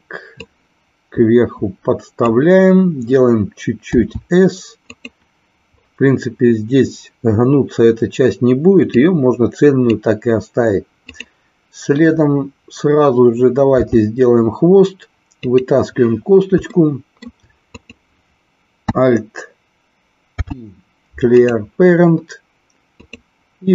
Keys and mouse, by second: 0.3-2.2 drag, 3.9 s, 4.9 click, 8.9 click, 11.2 click, 13.8 e, 15.4 click, 16.8 shift+middle click, 17.7 click, 20.3 alt+p, 22.9 click.